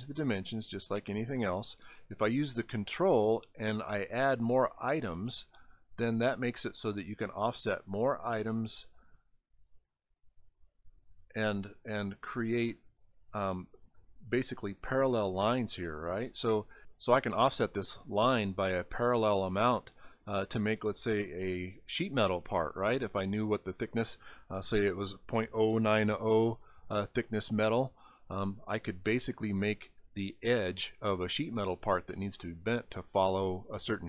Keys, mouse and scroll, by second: 3.2 ctrl+click, 5.0 ctrl+click, 8.7 ctrl+click, 13.1 ctrl+click, 14.4 ctrl+click, 32.3 scroll down 4, 33.4 scroll down 1.